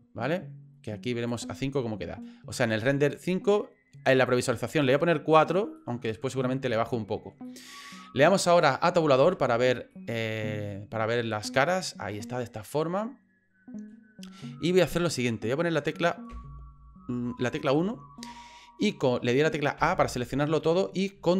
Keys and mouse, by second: 1.3 click, 4.8 click, 5.8-7.3 middle drag, 7.4 middle click, 9.2 Tab, 9.9-13.9 middle drag, 14.4 middle click, 16.3 KP_1, 19.8 a.